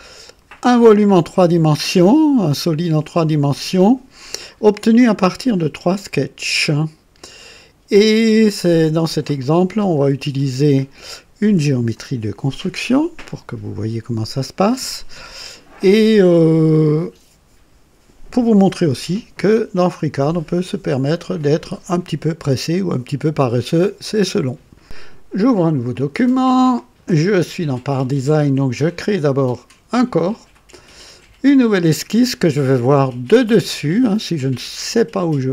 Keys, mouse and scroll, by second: 1.0-3.5 drag, 3.7-5.0 drag, 9.4 click, 24.8 click, 25.9 click, 29.9 click, 31.4 click.